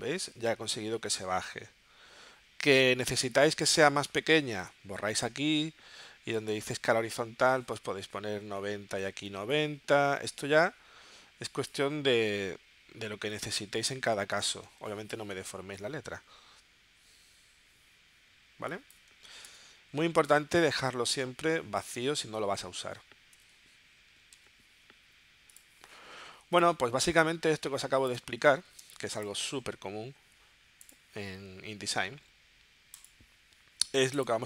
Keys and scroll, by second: 4.6 BackSpace, 5.3 Tab, 8.0-9.5 typing, 13.3 9, 13.7 Tab, 19.5 BackSpace, 19.7 Tab, 23.3 -, 24.1 1, 27.8 space.